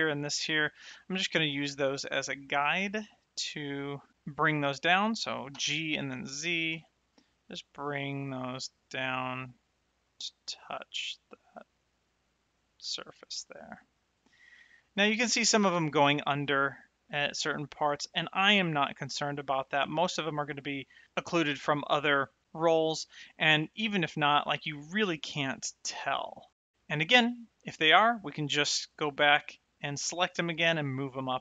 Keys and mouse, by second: 2.1 shift+middle click, 2.7 shift+right click, 5.9 g, 6.1 z, 14.9 click, 19.9 shift+middle click, 22.7 middle click, 23.8 shift+middle click, 25.6 shift+middle click, 26.2 middle click.